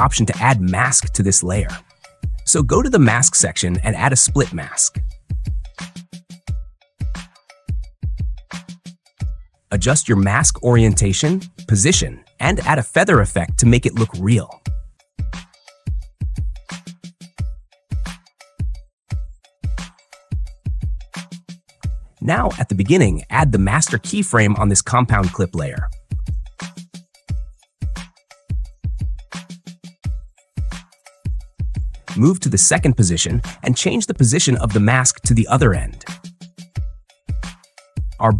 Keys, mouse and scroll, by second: 0.5 click, 3.4 click, 6.5 click, 7.8 click, 9.7 click, 12.5 click, 16.2 click, 22.8 click, 30.5 click, 33.1 click, 35.6 click.